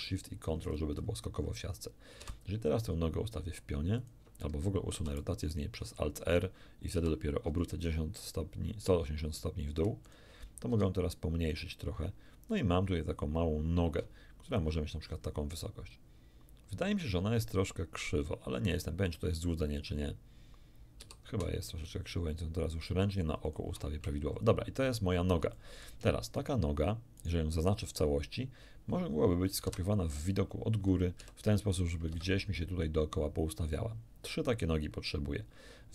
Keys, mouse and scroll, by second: 0.1 scroll up 1, 0.3-1.4 scroll down 1, 2.2 r, 4.0 ctrl+click, 4.9 ctrl+alt+r, 6.9 r, 10.1 ctrl+click, 10.7 ctrl+s, 14.5 ctrl+click, 15.1-16.1 ctrl+scroll up 6, 16.8-18.4 scroll up 6, 18.8-20.3 scroll down 6, 21.0 r, 23.5 shift+click, 24.2-24.9 shift+scroll down 4, 25.5 shift+middle click, 26.3 shift+right click, 27.2 shift+right click, 29.7 KP_7, 31.2 r, 32.1 Escape.